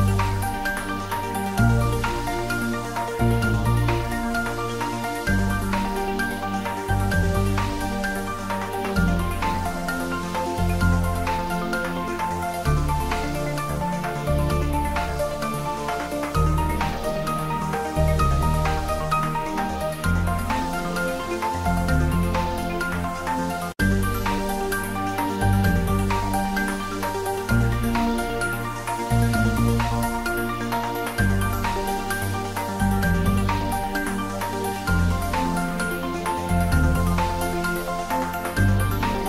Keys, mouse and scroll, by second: 2.6 middle click, 3.5 shift+click, 4.1-7.4 middle drag, 7.4-13.0 middle drag, 11.8 alt+shift+click, 15.1-17.7 middle drag, 17.8-20.2 drag, 20.2 Tab, 20.5 middle click, 21.1 ctrl+3, 21.8-23.1 middle drag, 23.1 right click, 23.4 click, 23.7-25.9 ctrl+middle drag, 25.9 click, 26.5-28.9 middle drag, 28.9 click, 30.5 ctrl+middle click, 31.1-32.1 typing, 34.7 Return, 35.8 ctrl+middle click, 36.2 ctrl+s, 37.9 click, 39.0 ctrl+s.